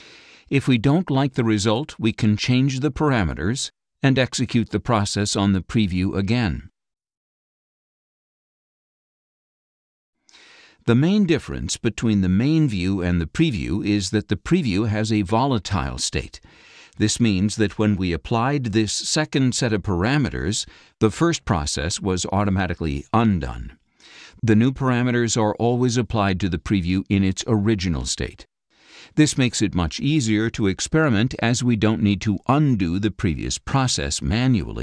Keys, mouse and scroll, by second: 0.4 ctrl+shift+z, 2.8-5.0 drag, 6.1 click, 12.2 click, 13.2 click, 13.3 scroll up 2, 18.5-18.8 scroll up 4, 18.5 click.